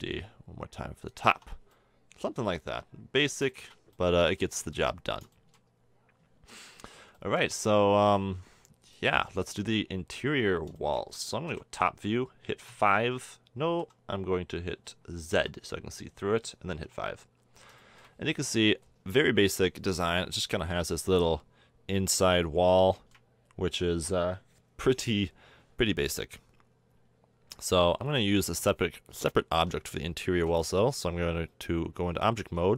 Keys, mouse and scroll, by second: 0.0-1.1 drag, 1.2 a, 1.3 Tab, 1.5-1.9 drag, 1.9 middle click, 2.3-3.0 drag, 4.8-5.8 middle drag, 5.9 middle click, 6.8-7.2 middle drag, 7.3-9.1 middle drag, 11.5 KP_7, 12.7 KP_5, 13.7 KP_8, 14.5 KP_7, 15.3 z, 16.8 KP_5, 21.9-22.5 middle drag, 23.0-25.5 middle drag, 25.9-27.3 middle drag, 28.6 Tab, 29.6 Tab, 30.5 a.